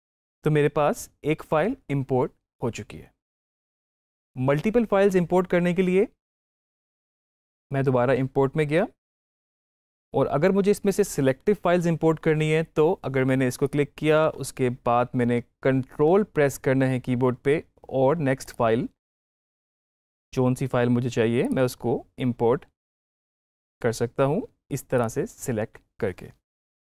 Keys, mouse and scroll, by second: 3.5 click, 3.8 ctrl+z, 6.6 click, 8.9 click, 13.5 click, 18.3 click, 21.3 ctrl+click, 24.8 ctrl+click.